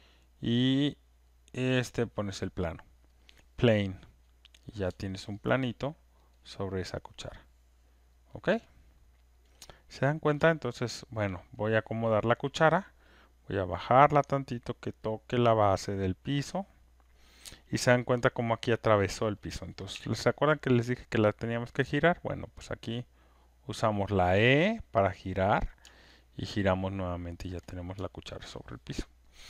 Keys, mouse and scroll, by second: 2.1 right click, 4.6 click, 5.3 alt+right click, 5.8 alt+click, 6.2 alt+right click, 8.1 alt+click, 8.6 alt+right click, 9.4 alt+click, 10.7 alt+right click, 10.9 alt+click, 11.2 alt+right click, 11.6 click, 16.3 click, 18.9 alt+middle click, 20.0 alt+scroll, 25.3 click, 27.2 alt+click, 27.7 click, 28.3 alt+right click, 29.2 alt+click.